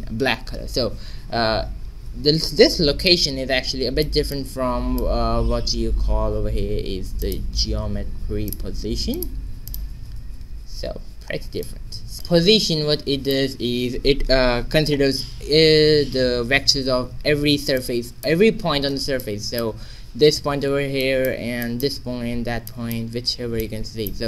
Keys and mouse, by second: 1.9 shift+z, 4.3 click, 5.3 shift+a, 9.6-11.6 drag, 10.3 shift+z, 11.6 middle click, 12.1 alt+g, 12.1 q, 12.8-13.9 middle drag, 17.7-24.2 middle drag.